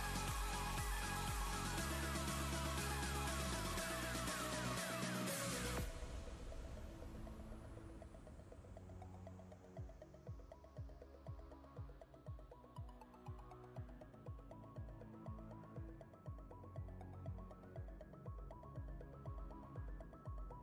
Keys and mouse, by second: 2.5 right click, 9.7 click, 15.1 shift+click, 15.9 right click, 17.2 click.